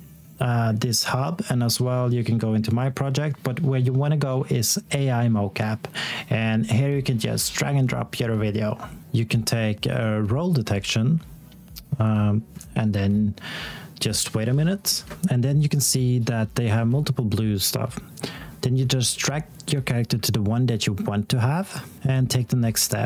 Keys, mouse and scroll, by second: 9.1 click.